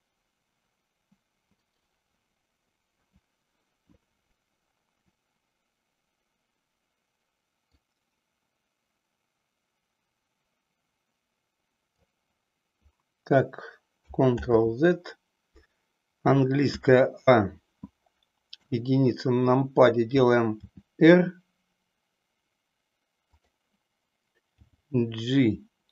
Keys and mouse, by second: 7.8-12.0 drag, 14.6 ctrl+z, 16.6 a, 18.5 KP_1, 20.6 r, 24.5 g.